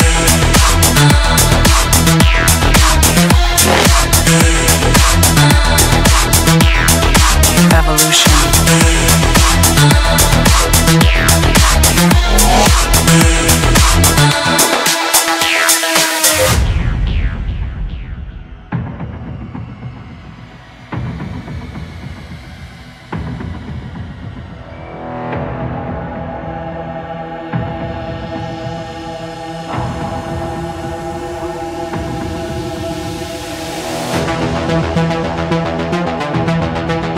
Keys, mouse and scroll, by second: 2.2 right click, 3.2 click, 5.4 click, 6.5 click, 8.7 click, 9.4 click, 9.8-10.8 scroll, 11.0 scroll, 11.2-12.4 scroll down 3, 12.4 scroll, 15.0 click, 17.7 click, 18.8 click, 20.9-22.0 drag, 23.0 click, 27.8 click, 30.4-31.4 scroll, 33.8 scroll, 35.5-36.5 scroll.